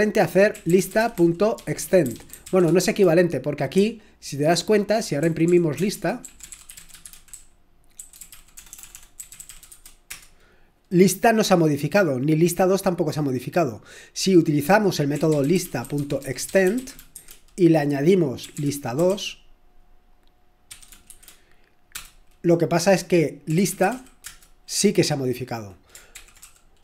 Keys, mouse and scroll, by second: 0.6-10.2 typing, 15.4-17.1 typing, 18.4-19.1 typing, 20.7-21.1 typing, 21.9 Return, 23.2-24.4 typing, 26.1 ctrl+p, 26.2-26.8 typing.